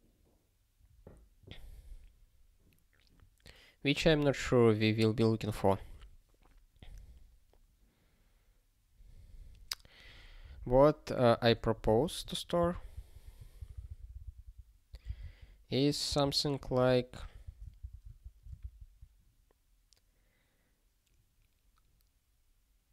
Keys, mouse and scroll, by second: 12.9 super+o, 13.6 ctrl+n, 13.7 ctrl+n, 14.9 ctrl+p, 15.1 Return, 15.3 ctrl+y, 16.0 Return, 16.4 ctrl+p, 17.8 alt+b.